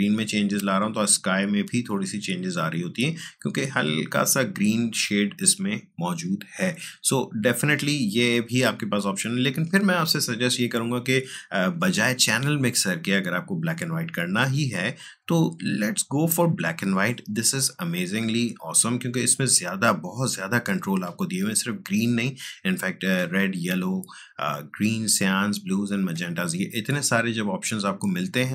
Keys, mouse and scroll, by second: 9.3 click, 12.5-14.8 drag, 18.8-24.9 drag.